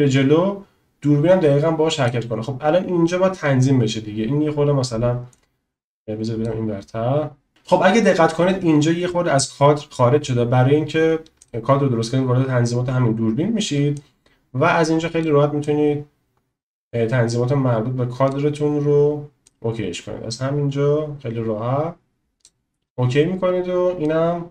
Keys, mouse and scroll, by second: 5.4-6.6 drag, 14.1-15.3 drag, 15.7-18.4 drag, 19.4-22.5 drag, 24.1-24.5 drag.